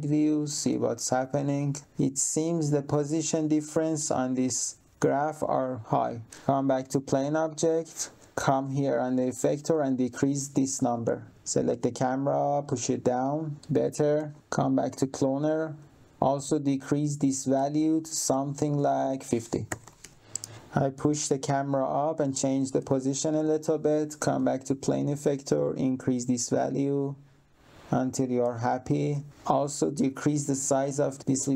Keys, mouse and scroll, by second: 0.6 2, 0.6 click, 1.3 1, 1.5 click, 6.3 click, 7.8 click, 9.1 click, 12.6 click, 14.4 click, 17.2 click, 19.4-20.3 typing, 20.2 middle click, 20.5 click, 24.0 click, 25.3 click, 29.1 click, 31.4 click.